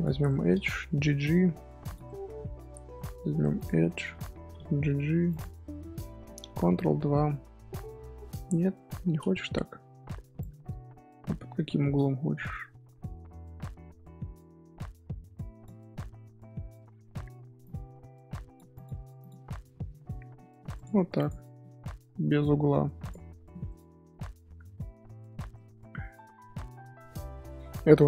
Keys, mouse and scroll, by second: 0.2 middle click, 0.8 g, 2.0-3.5 middle drag, 3.5 alt+click, 3.8 middle click, 4.4 g, 5.7 scroll down 1, 5.8-6.6 middle drag, 6.6 ctrl+2, 7.1-8.4 middle drag, 8.4-9.3 scroll up 2, 9.3-10.3 scroll down 1, 10.3-13.4 drag, 17.6-20.3 drag, 20.3-20.7 middle drag, 20.7-21.5 right drag, 21.5-22.5 middle drag, 22.5 scroll down 1, 23.0 click, 23.4 scroll down 2, 23.6-24.5 middle drag, 24.5 scroll up 3, 25.1 Tab, 25.5-27.2 middle drag, 27.2 Tab, 27.6-28.0 middle drag.